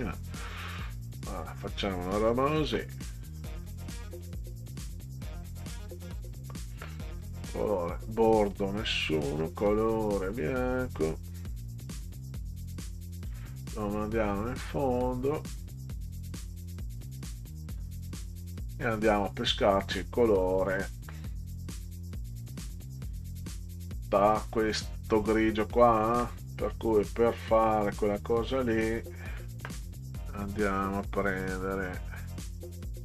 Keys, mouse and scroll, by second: 1.5 click, 5.1 click, 6.3 click, 7.0 scroll up 2, 7.7 click, 8.5 click, 9.3 click, 12.1 click, 14.6 click, 16.4 click, 21.7 click, 26.5-27.1 scroll down 4, 31.3 click.